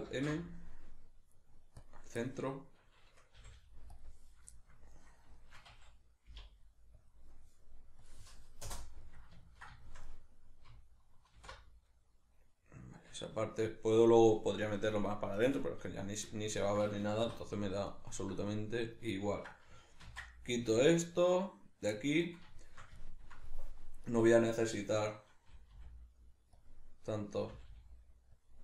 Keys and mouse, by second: 0.1 alt+m, 2.2-17.9 middle drag, 3.4 g, 4.0 click, 6.3 k, 11.3 alt+h, 17.2 2, 17.9 alt+right click, 19.0-24.1 ctrl+middle drag, 20.1 ctrl+x, 24.1 right click, 25.5 g, 26.7 click, 27.5 g, 28.5 click.